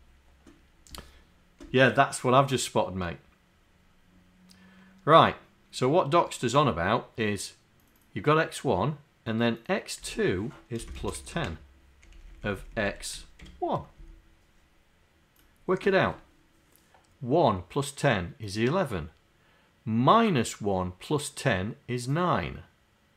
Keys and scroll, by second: 11.0 KP_Add, 11.0 space, 11.2 KP_1, 11.4 KP_0, 12.6 Left, 12.9 Left, 13.4 1, 14.0 Down.